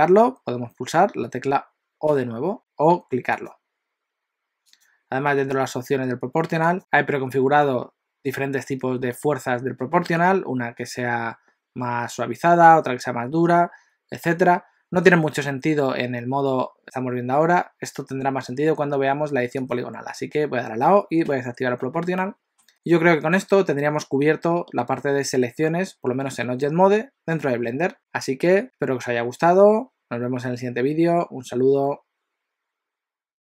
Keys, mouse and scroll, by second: 2.3 o, 2.6 click, 3.3 click, 4.8 click, 6.7 click, 21.2 o, 22.2 middle click.